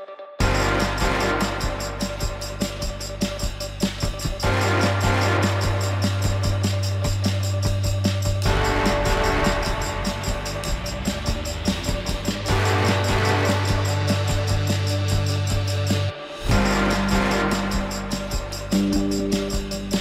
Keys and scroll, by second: 4.1 alt+x, 8.8 F4.